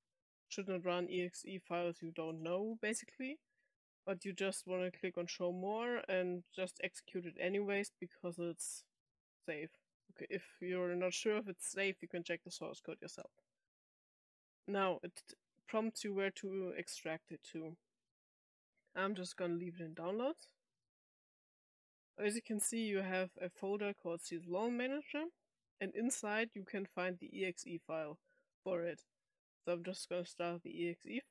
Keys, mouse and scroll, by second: 2.8 click, 12.4 click, 19.9 click, 24.8 click, 24.9 click, 30.4 click, 30.6 click.